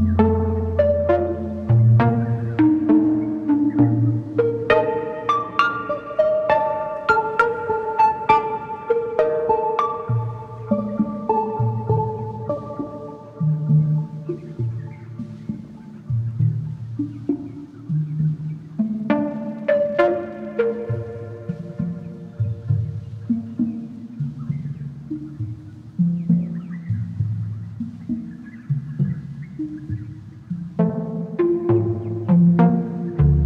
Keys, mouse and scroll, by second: 0.0 scroll up 3, 0.3-2.6 shift+middle drag, 4.7-6.0 middle drag, 6.0-7.3 shift+drag, 10.5-12.4 drag, 13.0-14.4 shift+drag, 23.1 s, 30.0-32.1 shift+drag.